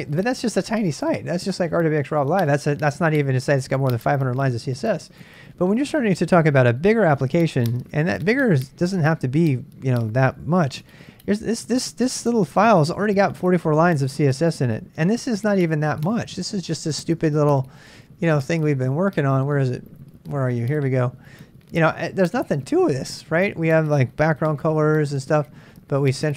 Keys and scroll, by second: 0.0-0.7 typing, 5.2 Return, 10.5 ctrl+[, 10.6-13.0 j, 13.3-16.0 k, 16.0 super+Tab, 24.2 BackSpace, 24.4 BackSpace, 24.7 Return.